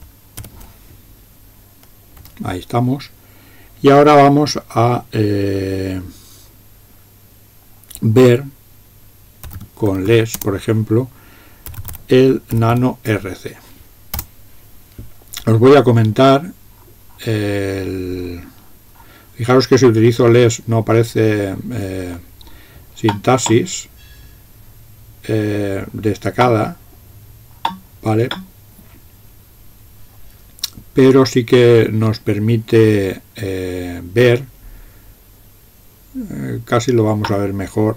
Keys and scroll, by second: 0.4 typing, 2.3 typing, 9.3-13.3 typing, 14.2 Return.